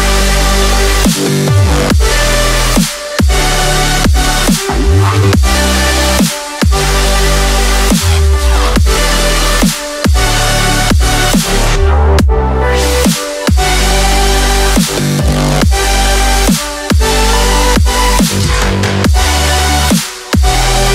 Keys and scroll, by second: 0.2 alt+a, 1.4 ctrl+a, 1.6 ctrl+l, 10.2 alt+a.